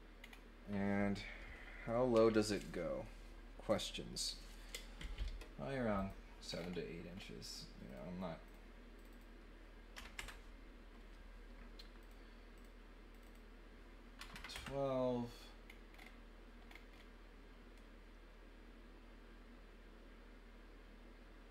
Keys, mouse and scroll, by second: 0.2 middle click, 5.9 click, 6.5 middle click, 7.1 scroll up 1, 7.8 click, 8.4 click, 8.9 click, 9.1 click, 12.0 click, 12.5 click, 13.1 click, 15.6-16.0 scroll down 3, 16.6 scroll down 2, 16.9 scroll up 2.